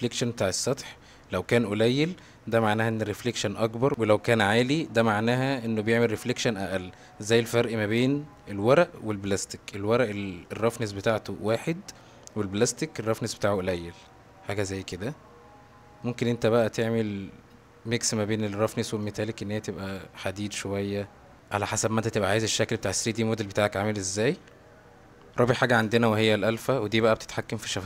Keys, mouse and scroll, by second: 7.9 click, 12.7 click, 13.9-14.6 middle drag, 15.0-16.0 middle drag, 16.7-18.1 middle drag, 19.0-21.3 drag, 26.6-27.2 drag.